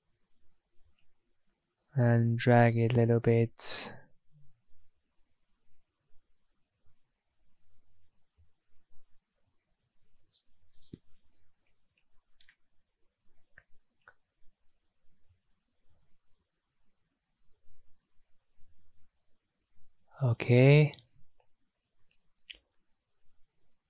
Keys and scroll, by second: 17.6 ctrl+z.